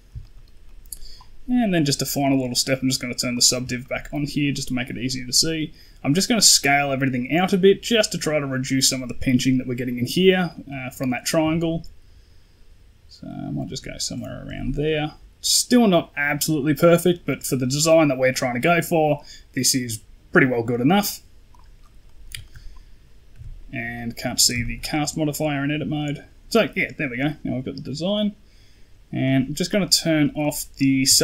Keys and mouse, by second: 0.1 shift+middle click, 0.5 middle click, 2.3 click, 3.2 click, 3.7 shift+middle click, 10.6 click, 11.3 s, 14.8 middle click, 17.5 middle click, 19.6 middle click, 20.3 middle click, 21.4 click, 21.9 middle click, 22.3 shift+middle click, 23.2 Tab, 23.8 middle drag, 24.5 shift+middle drag, 25.3 middle drag, 25.8 middle drag, 29.1 click, 30.3 click, 30.6 middle click, 31.0 shift+middle drag.